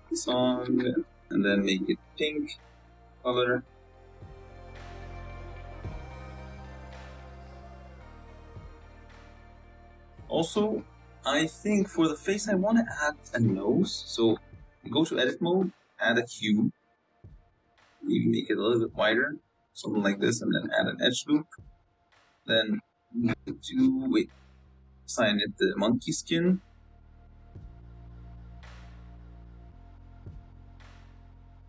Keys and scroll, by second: 6.9 Tab, 7.6 z, 10.6 z, 13.4 Tab, 14.7 shift+a, 15.9-18.3 typing, 19.2 ctrl+r, 20.7 Tab, 21.1 z, 22.1 Tab, 22.4 a, 23.2 l, 26.3 g, 26.9 g, 27.3 s, 30.8 Tab.